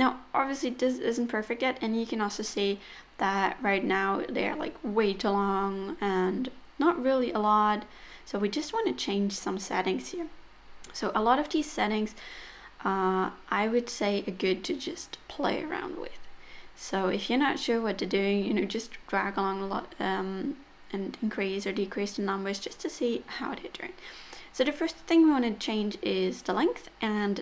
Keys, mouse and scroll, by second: 0.9 middle click, 4.0 click, 6.9-8.0 scroll up 3, 7.3 middle click, 8.5 click, 11.8 middle click, 15.0 middle click, 16.0 middle click, 19.3 click, 20.9 KP_0, 21.0 KP_0, 22.8 middle click, 26.5-27.4 scroll down 2.